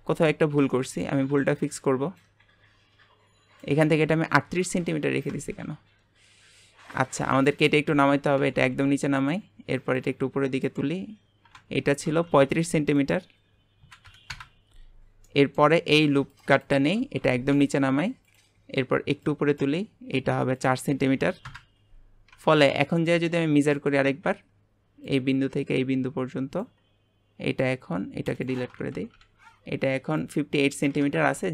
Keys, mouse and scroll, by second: 0.7-2.2 shift+middle drag, 2.2-5.4 ctrl+drag, 5.4 Tab, 7.2 click, 7.6 alt+shift+click, 7.9 alt+shift+click, 8.4 g, 10.0 click, 12.2 click, 13.0-15.3 drag, 15.3 middle click, 15.9 click, 16.3 alt+shift+click, 16.7 alt+shift+click, 17.2 g, 19.2 click, 20.6-22.3 drag, 22.3 Tab, 22.8-25.1 shift+middle drag, 25.1-26.9 ctrl+drag, 26.9 scroll up 2, 28.3 click, 28.9 Delete, 29.2 Delete, 29.7-31.4 scroll down 1.